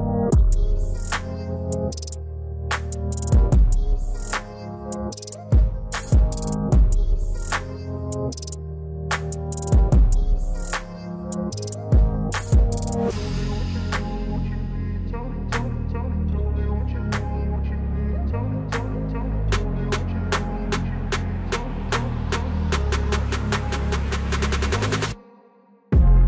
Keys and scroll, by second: 10.8 F4, 25.7 F4.